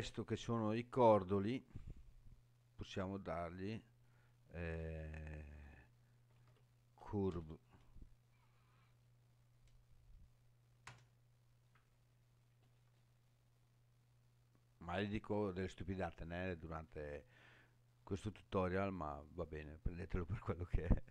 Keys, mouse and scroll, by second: 2.9-11.7 drag, 17.0-18.2 scroll up 3, 18.2-19.0 scroll down 1, 19.0-19.5 scroll down 2, 20.3 click.